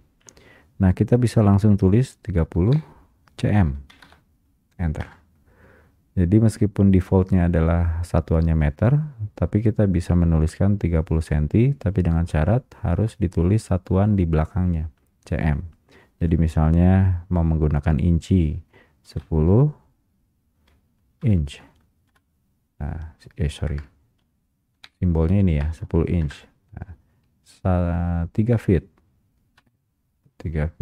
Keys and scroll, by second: 21.0 Return, 22.2 Return, 26.4 Return.